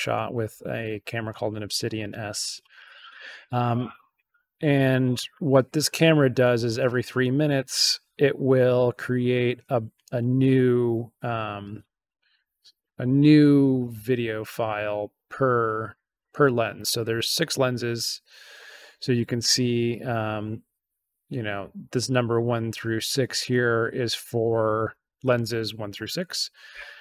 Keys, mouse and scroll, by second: 2.5-3.5 scroll up 2, 3.5 scroll up 1.